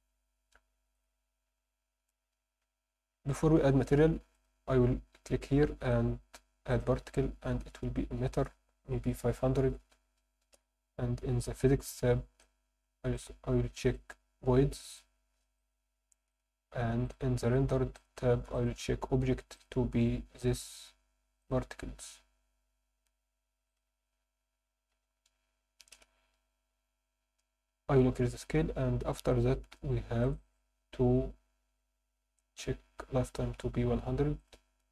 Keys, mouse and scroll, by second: 0.9 click, 2.6-3.1 scroll down 3, 3.0-3.9 scroll up 2, 4.3 click, 6.7 click, 8.3-10.4 drag, 9.8 0, 10.7-11.3 scroll down 3, 12.4 click, 13.1 click, 13.8-15.0 drag, 15.6-16.4 drag, 17.0 click, 18.0 drag, 18.5-19.7 drag, 20.6 click, 21.8-22.6 scroll down 4, 22.9-23.7 scroll up 1, 23.7-26.0 drag, 23.7 scroll up 1, 29.2-29.6 scroll down 2, 29.6-30.2 scroll up 2, 30.2 click, 32.3-32.9 scroll up 4, 32.9 scroll down 1, 34.4-34.9 drag.